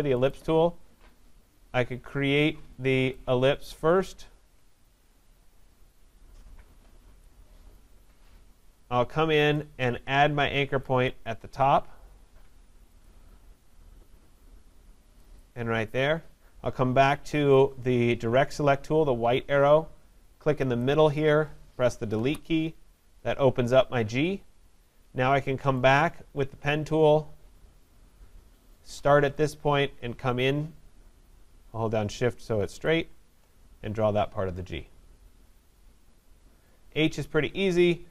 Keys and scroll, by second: 22.1 Delete.